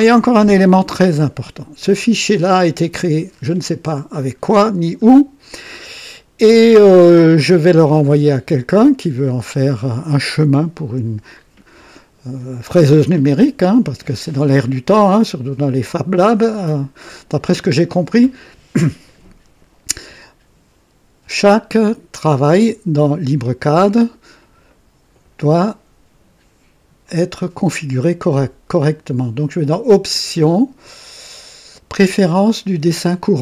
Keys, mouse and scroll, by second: 6.5-7.7 middle drag, 8.8 scroll up 1, 15.3-16.6 middle drag, 27.0 click.